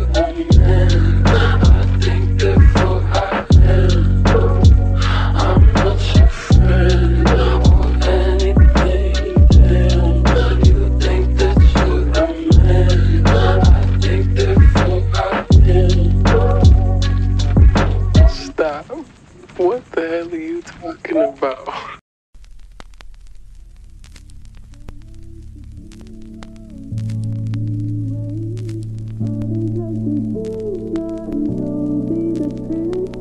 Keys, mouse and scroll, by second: 10.1-11.7 typing, 19.6 s, 21.1 u, 27.8 ctrl+z.